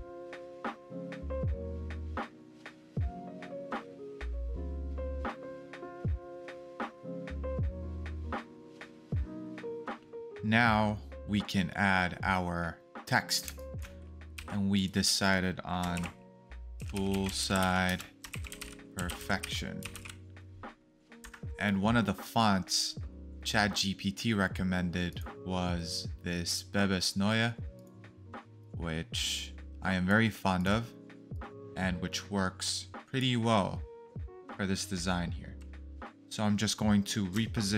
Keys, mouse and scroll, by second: 0.1 click, 0.1 alt+scroll down 1, 1.1 space, 1.3 alt+scroll up 1, 2.1 BackSpace, 2.8 ctrl+z, 2.9 BackSpace, 4.3 space, 5.9 alt+scroll down 1, 6.2 space, 8.6 alt+scroll down 1, 9.2-9.7 alt+scroll down 1, 13.4 scroll down 1, 13.5 space, 14.3 t, 15.9-19.9 typing, 21.2 Escape, 37.3 Escape.